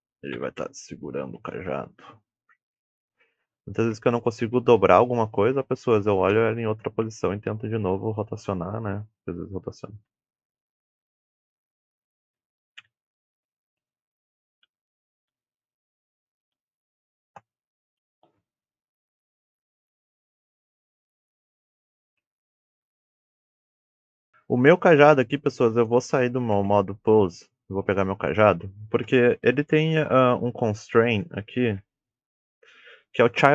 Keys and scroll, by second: 14.0-15.3 typing, 17.3-24.1 typing.